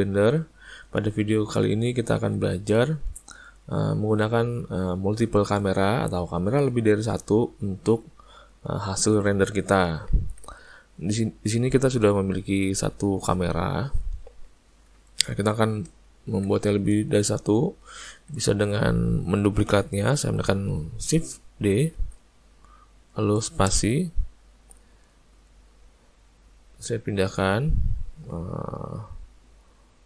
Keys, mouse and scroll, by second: 0.6 ctrl+middle click, 1.0 shift+middle click, 2.0 ctrl+middle click, 10.0 ctrl+middle click, 12.6 click, 15.4 shift+middle click, 16.3 ctrl+middle click, 16.7 middle click, 17.1 ctrl+middle click, 17.6 shift+middle click, 18.1 ctrl+middle click, 18.5 shift+middle click, 22.1 shift+d, 25.4 click, 29.9 middle click.